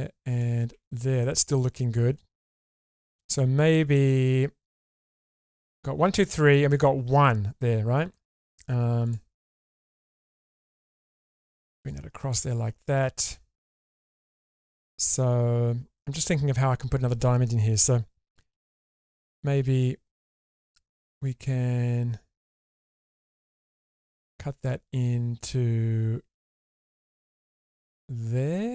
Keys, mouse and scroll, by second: 0.3 click, 0.7 4, 1.2 middle click, 1.9 scroll down 1, 2.2 shift+middle click, 2.6-4.9 middle drag, 5.3 middle click, 7.8 scroll down 2, 8.1 middle click, 9.0 click, 9.4-10.6 scroll up 2, 10.6 click, 11.9 click, 12.6 scroll down 1, 12.8 shift+middle click, 13.2-14.8 middle drag, 18.5 k.